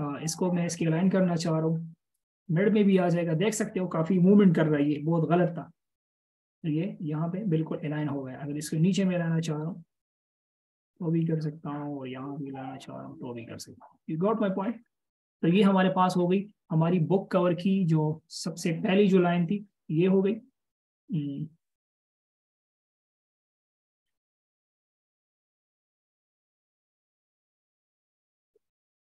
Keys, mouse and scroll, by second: 4.7-5.1 alt+shift+scroll up 1, 6.8 double click, 15.4-16.0 alt+shift+scroll down 1, 16.0-16.6 alt+shift+scroll up 1, 16.6-16.9 scroll up 1, 16.9-17.3 scroll down 1, 22.2-22.5 alt+shift+scroll, 22.5-23.0 alt+shift+scroll up 1, 28.0 space.